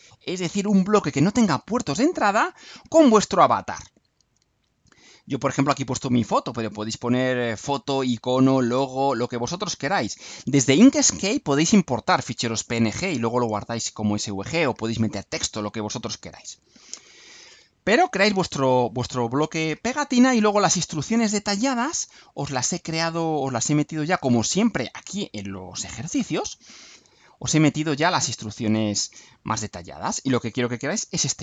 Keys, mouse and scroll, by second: 21.9 click, 25.7 click, 27.5-29.1 drag.